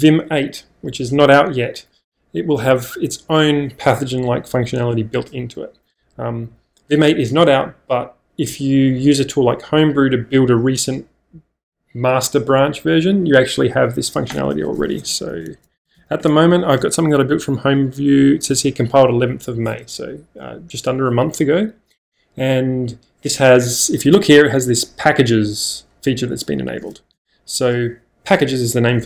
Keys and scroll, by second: 14.7-16.4 typing, 27.2 Return.